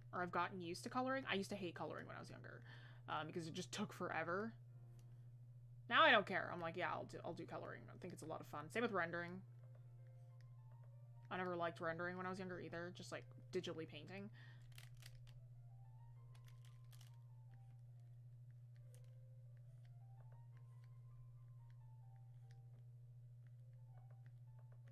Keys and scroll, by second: 7.1 ctrl+z, 9.6 ctrl+z.